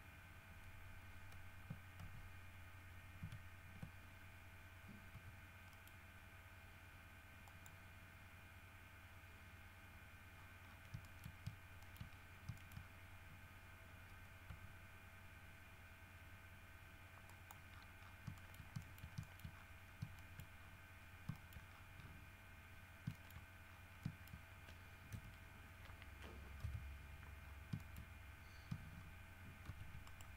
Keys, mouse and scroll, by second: 2.2 ctrl+z, 3.4 ctrl+z, 4.2 ctrl+scroll up 2, 5.3 g, 5.9 middle click, 7.6 click, 9.0 scroll up 1, 10.5 scroll down 1, 10.7 scroll up 1, 10.8 scroll down 1, 11.2 shift+middle click, 12.0 shift+middle click, 12.3-13.5 shift+scroll up 5, 12.7 shift+middle click, 14.0 scroll up 2, 14.6 r, 17.4 middle click, 18.0-18.4 scroll down 2, 18.5 shift+middle click, 19.1 shift+middle click, 19.7-20.3 shift+scroll up 2, 20.3 shift+middle click, 20.7-21.0 shift+scroll up 1, 21.5 shift+middle click, 21.9-22.4 shift+scroll down 1, 23.3 shift+middle click, 23.8 shift+scroll up 1, 24.2 shift+middle click, 25.3 KP_1, 26.8 KP_7, 27.6-27.9 scroll down 3, 28.0 shift+middle click, 29.8 shift+d, 30.2 shift+right click.